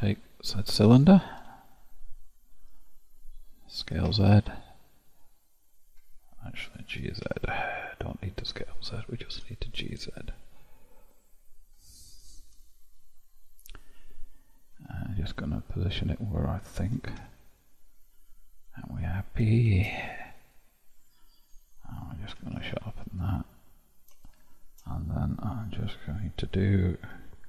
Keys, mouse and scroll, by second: 1.4 KP_7, 3.9 s, 9.3 KP_7, 11.0-11.4 scroll up 1, 14.8 g, 19.7 shift+z, 20.6-22.3 middle drag, 22.3 q, 24.2 shift+click, 27.1 q.